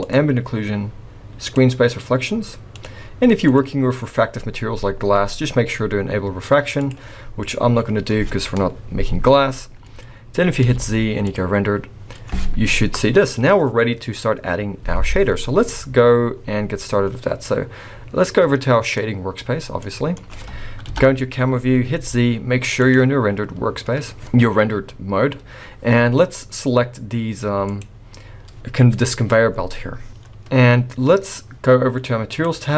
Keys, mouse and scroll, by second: 0.0 click, 2.7 click, 3.5 click, 6.7 click, 7.2-7.8 scroll up 3, 9.6 scroll down 1, 10.6 z, 15.0-17.8 scroll down 2, 17.8 scroll down 1.